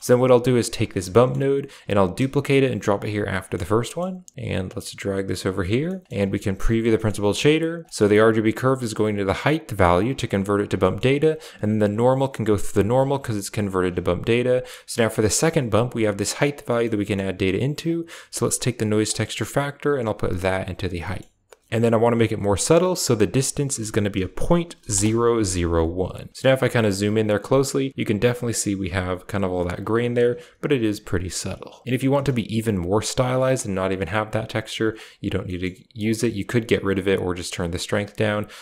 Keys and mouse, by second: 0.7 right drag, 1.0 middle click, 2.1 shift+d, 3.3 middle click, 3.8 middle click, 4.6 click, 4.8 click, 5.8 middle click, 6.5 ctrl+shift+click, 6.9 middle click, 7.7 click, 7.8 middle click, 8.5 click, 10.7 middle click, 13.2 click, 14.5 click, 16.6 middle click, 16.9 middle click, 17.8 click, 19.0-20.4 drag, 20.9 middle click, 22.8 click, 34.4 click, 34.9 click, 35.3 middle click, 35.9 click, 36.9-38.6 drag.